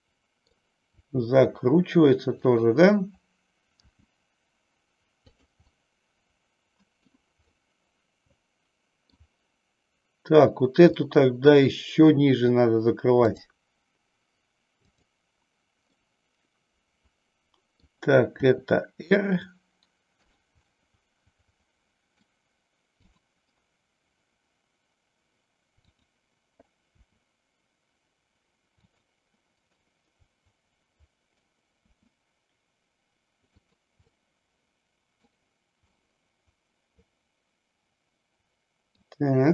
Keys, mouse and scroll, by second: 1.1 r, 3.9 g, 5.7-7.1 middle drag, 7.6-9.3 middle drag, 11.0 middle click, 16.1-17.9 middle drag, 18.5 r, 20.3 click, 20.7-22.4 middle drag, 23.1 click, 25.8 click, 27.1 r, 29.9-31.5 middle drag, 31.9 r, 33.8 click, 34.1-35.5 middle drag, 36.0-39.1 middle drag.